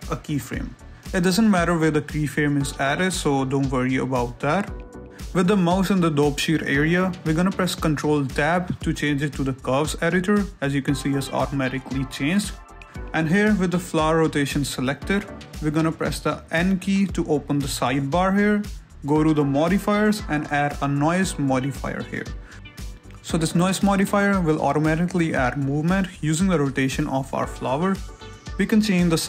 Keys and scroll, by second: 0.5 a, 5.1 g, 8.0 ctrl+Tab, 10.0 Escape, 10.9 shift+space, 12.8 a, 24.4 n.